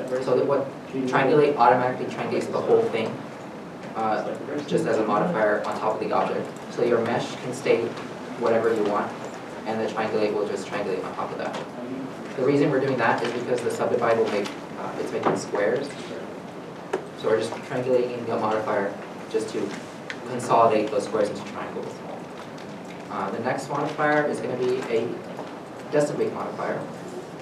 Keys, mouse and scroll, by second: 0.1 middle click, 3.4 middle click, 3.7 scroll up 1, 6.9 scroll, 6.9 Tab, 8.2 3, 9.5 Tab, 12.2 middle click, 14.8 scroll up 1, 15.4 middle click, 16.9-17.5 scroll down 1, 17.5 middle click.